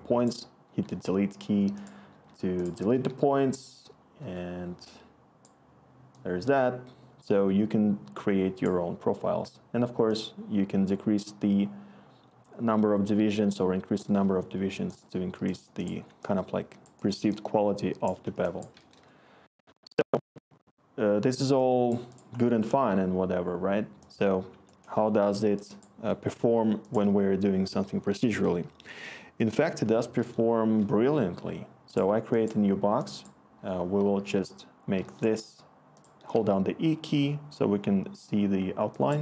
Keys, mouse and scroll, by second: 0.6 Delete, 2.9 Delete, 4.2 Delete, 18.9 Return, 29.4 Tab, 29.6-30.7 typing, 31.0 Return, 34.7-36.3 typing.